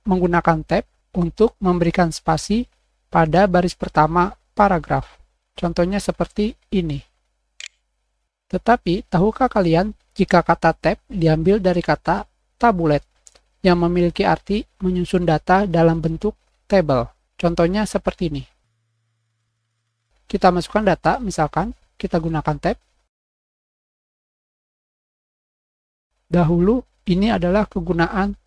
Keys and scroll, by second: 7.5 Tab, 22.4-24.2 typing, 24.1 Return, 24.3 Tab.